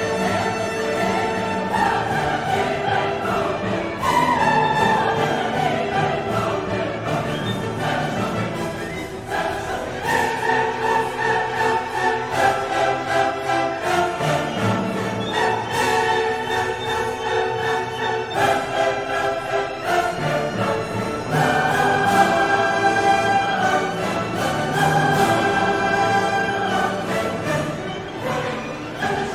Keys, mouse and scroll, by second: 0.0 click, 1.0 click, 2.0 click, 3.8 click, 4.6 right click, 5.6 click, 6.3 click, 6.8 click, 8.3 click, 9.3 click, 10.4-12.5 drag, 14.3-15.2 scroll up 1, 15.2 middle click, 15.4-16.0 scroll up 1, 16.0 middle click, 16.2-16.7 scroll up 1, 16.7 middle click, 16.8-17.2 scroll up 2, 17.3-17.8 scroll up 2, 17.9-18.3 scroll up 2, 18.4 scroll down 2, 18.5 scroll up 2, 19.6 click, 21.5 scroll up 2, 22.2-22.7 scroll down 2, 23.0-23.4 scroll up 2, 24.0-25.4 scroll down 7, 27.0 click, 28.2 right click, 29.1 click.